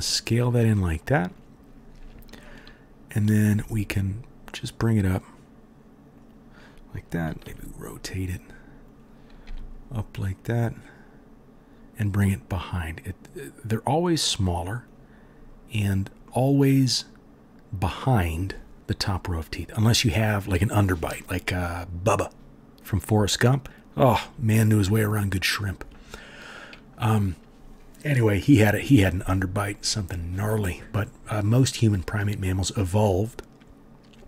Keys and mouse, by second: 3.5 g, 7.4 r, 9.4 g, 15.1 right click, 15.2 click, 15.3 right click, 15.4 click, 15.5-17.4 drag, 17.4 right drag, 17.5 drag, 17.8 right click, 17.9 click, 18.4 right click, 18.7 ctrl+KP_3, 19.0-29.2 drag, 29.2-34.2 right drag.